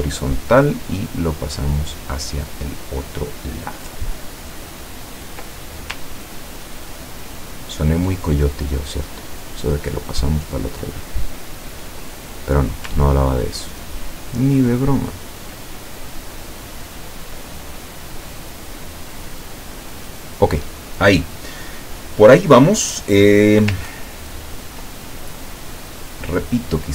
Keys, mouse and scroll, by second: 1.0-5.9 ctrl+drag, 6.1-8.0 ctrl+drag, 10.0 click, 11.2-12.7 drag, 13.2-15.5 ctrl+drag, 15.9 ctrl+click, 16.7 click, 17.7-19.8 drag, 24.1 ctrl+scroll down 2, 26.2-26.9 middle drag.